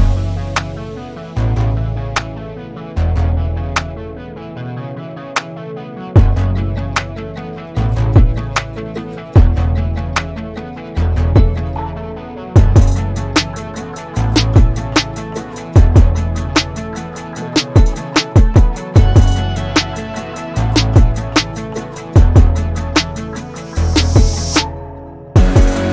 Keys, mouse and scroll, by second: 3.3-3.9 scroll up 1, 3.9-4.2 shift+middle drag, 4.2-4.9 scroll up 4, 4.9 alt+z, 5.4 z, 6.7 alt+z, 7.4 drag, 8.7 drag, 9.9 shift+middle click, 10.5 Tab, 11.2 alt+z, 11.7 1, 12.0 click, 12.4 click, 13.2-13.7 scroll up 1, 13.7 g, 16.3 space, 16.6 alt+z, 17.1 Tab, 17.3 click, 17.5-17.9 scroll down 5, 17.9-19.9 middle drag, 20.5 scroll down 4, 20.7-22.7 middle drag, 23.3-23.6 scroll up 3, 23.6-24.4 shift+middle drag, 24.4-25.5 scroll down 2, 25.5-25.9 scroll down 1.